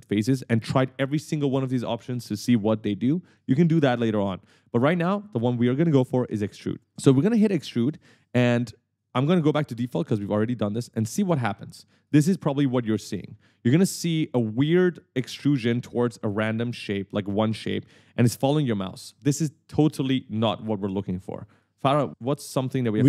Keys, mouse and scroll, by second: 6.9 click, 9.5 click, 10.2 click, 11.6 right click, 11.7 s, 21.1 right click, 21.2 w.